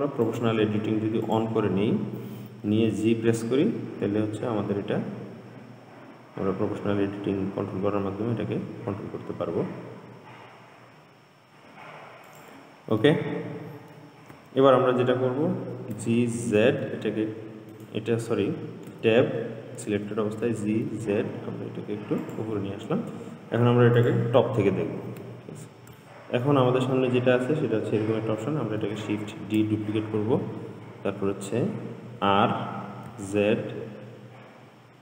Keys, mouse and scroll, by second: 0.5 click, 1.5 click, 3.1 g, 13.3-16.2 middle drag, 16.2 g, 19.1 Tab, 20.6 g, 24.2 click, 25.0-25.5 scroll down 3, 26.2-27.0 shift+middle drag, 27.0-29.2 scroll up 3, 29.5 shift+d.